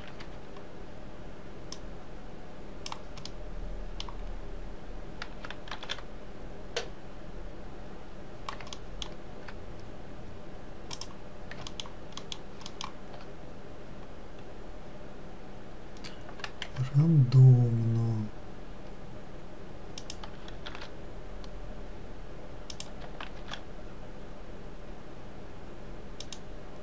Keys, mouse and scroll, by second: 0.2 ctrl+l, 2.2 click, 3.7-6.2 middle drag, 6.2 shift+d, 12.2 alt+middle click, 12.7 alt+middle click, 17.1 g, 21.2 shift+d, 23.9 shift+d.